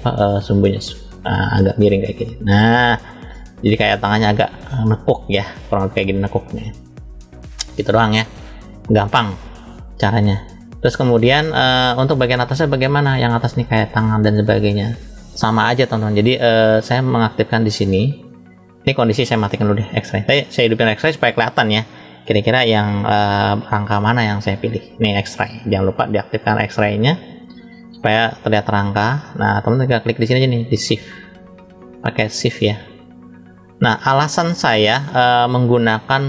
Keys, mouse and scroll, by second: 0.3 click, 0.5 click, 2.7-5.5 middle drag, 6.3 shift+middle click, 8.0-10.0 middle drag, 10.1-10.7 scroll down 1, 11.0 scroll down 1, 11.2 middle click, 12.0-12.4 scroll up 1, 12.4 middle click, 13.9 shift+middle click, 16.0 click, 16.5 click, 17.3 click, 19.3 click, 20.9 click, 22.1-24.5 middle drag, 30.3 shift+click, 31.2 shift+click, 31.8 middle click, 32.8 shift+click, 33.6 shift+middle click, 34.6-35.1 scroll up 2, 36.1 click.